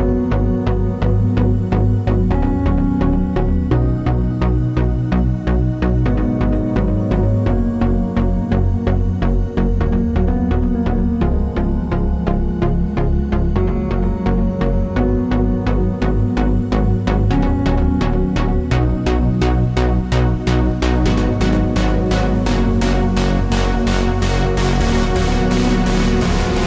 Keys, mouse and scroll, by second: 0.3 Tab, 0.6-2.1 scroll down 1, 2.1 click, 2.4 g, 5.7 Tab, 6.1-6.6 scroll down 1, 7.3 click, 7.4 middle click, 8.0 Tab, 8.2 2, 8.3 click, 8.7 shift+d, 8.8 Return, 9.6 Tab, 9.7 click, 10.0-12.1 middle drag, 10.4 KP_7, 11.4 Tab, 12.4 click, 12.8 click, 14.2 Tab, 14.5 click, 14.8-16.9 shift+middle drag, 15.0-15.8 scroll up 2, 15.8 e, 16.9 click, 17.0 1, 17.1 click, 17.4 g, 18.1 click, 19.7-21.0 middle drag, 20.5 KP_3, 21.3-23.1 drag, 22.0 g, 24.0 e, 25.2 click, 25.5 g.